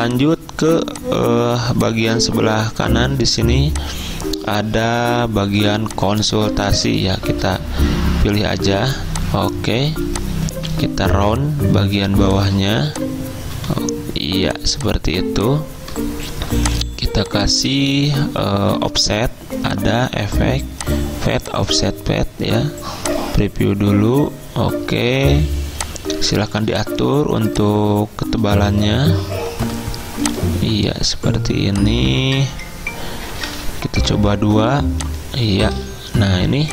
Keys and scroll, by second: 8.2-8.9 typing, 9.9 z, 10.7 a, 28.9 BackSpace, 29.7 BackSpace, 34.1 2.